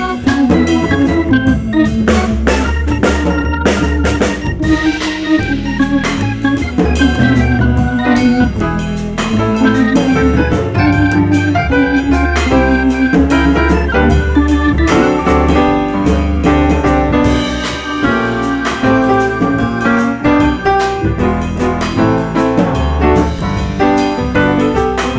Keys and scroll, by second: 3.6 F3, 4.7 ctrl+z, 5.0 F3, 5.7 F4, 8.1 2, 9.8 ctrl+z, 16.6 F4, 17.5 F4, 19.1 F4, 19.9 F4, 21.0 F4, 22.3 F4.